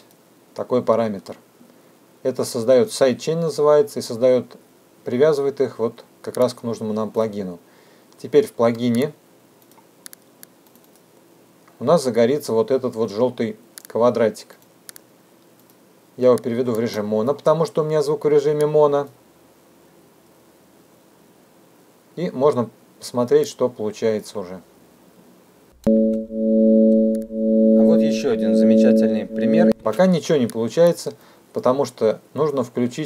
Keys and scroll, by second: 25.4 space.